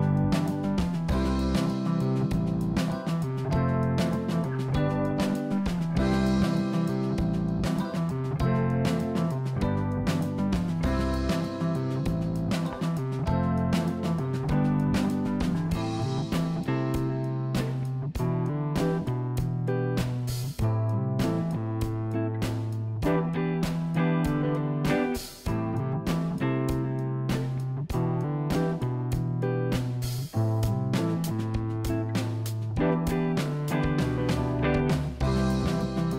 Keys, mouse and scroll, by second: 2.5 g, 10.5 click, 11.3 s, 12.9 click, 16.0 click, 17.4 shift+a, 21.7 g, 25.5 s, 27.8 s, 30.4-32.1 drag, 32.8 KP_0, 36.0 click.